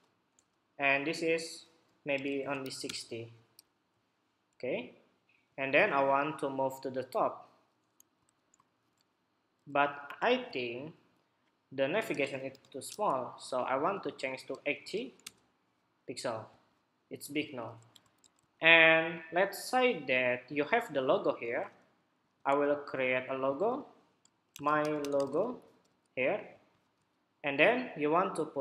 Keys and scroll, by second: 8.1 super+=, 17.9 super+=.